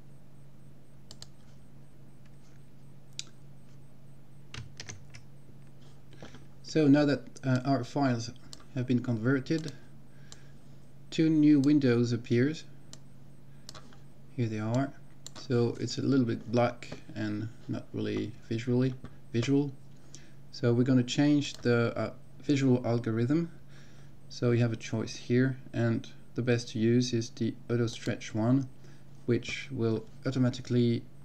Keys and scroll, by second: 5.0 ctrl+x.